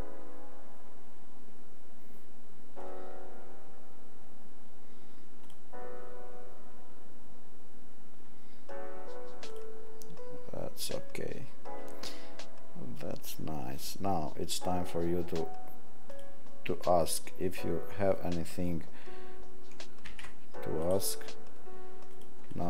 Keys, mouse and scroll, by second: 9.4 click, 20.0 ctrl+a, 22.1 click.